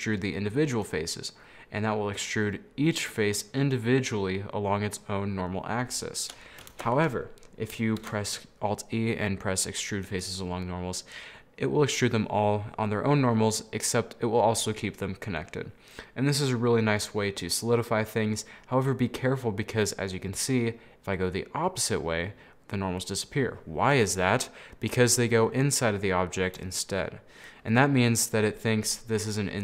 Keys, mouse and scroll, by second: 6.8 ctrl+z, 8.1 alt+e, 24.4 middle click, 25.0-26.3 scroll up 6, 25.2 middle click, 26.3-29.6 middle drag.